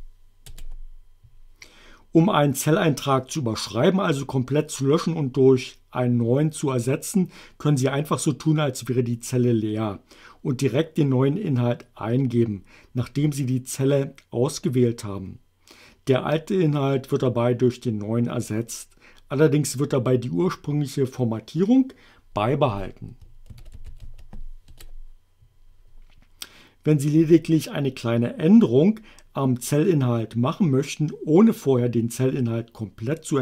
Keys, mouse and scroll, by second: 0.0-0.1 typing, 0.5 Return, 23.3-24.5 typing, 24.7 Return.